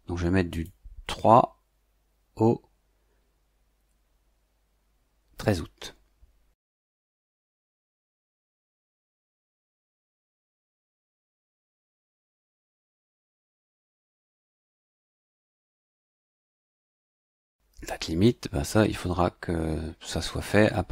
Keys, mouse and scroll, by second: 0.5 click, 8.9 click, 13.6 click, 15.1 click, 17.1 click.